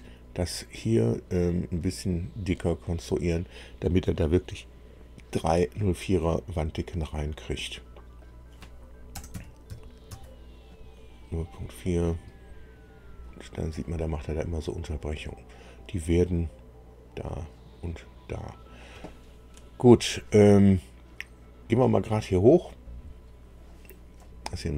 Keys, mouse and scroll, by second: 8.2 click, 9.1 KP_0, 9.3 KP_Decimal, 9.7 KP_4, 10.1 Tab, 11.8 click, 22.7-23.7 drag, 24.1-24.7 middle drag.